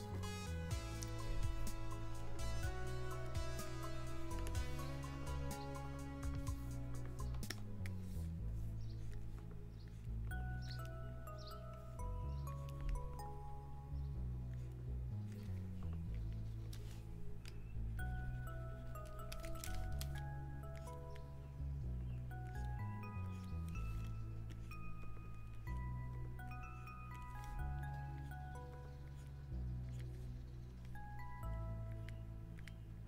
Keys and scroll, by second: 28.8 ctrl+z.